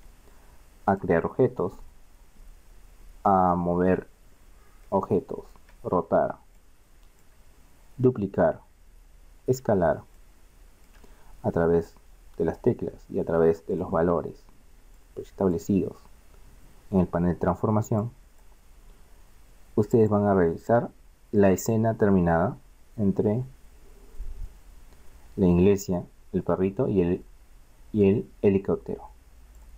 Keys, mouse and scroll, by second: 0.0 Escape, 0.6 middle click, 1.0 right click, 5.3-6.9 middle drag, 7.8 middle click, 8.6 middle click, 9.8 middle click, 10.8-13.8 middle drag, 13.8-17.1 drag, 18.1-19.8 drag, 20.1 click, 20.4 middle click.